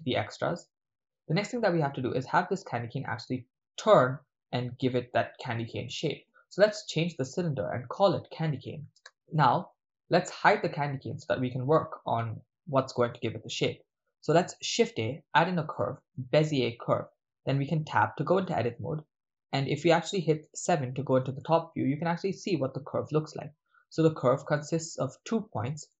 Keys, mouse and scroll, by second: 0.2 right click, 0.3 x, 7.0 click, 8.1 click, 11.2 click, 13.2-13.8 middle drag, 14.3 shift+a, 16.3 click, 17.7 Tab, 19.5 middle click, 20.5 KP_7, 21.4-22.2 ctrl+middle drag, 22.5-22.9 shift+middle drag, 24.6 click, 24.6 right click, 25.8 click, 25.8 right click.